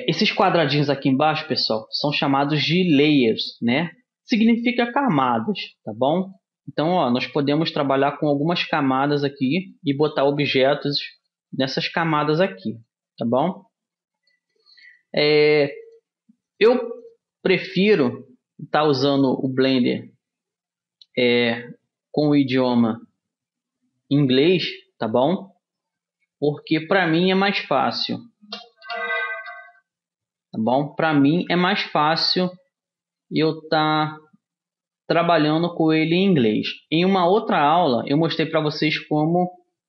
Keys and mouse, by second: 1.6-19.9 drag, 25.5-27.3 drag, 27.3-31.1 middle drag, 31.1 m, 35.9-37.4 drag, 37.4-39.8 middle drag.